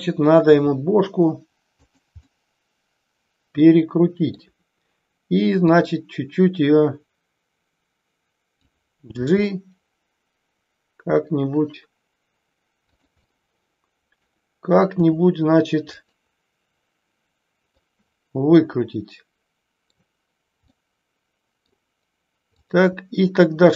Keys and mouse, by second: 0.5 r, 1.7 click, 2.2-4.3 middle drag, 5.6-8.6 drag, 9.1 g, 13.2-14.2 middle drag, 14.8 r, 15.8 click, 17.7-20.0 middle drag, 20.6-21.6 middle drag, 22.5 click, 23.6 r.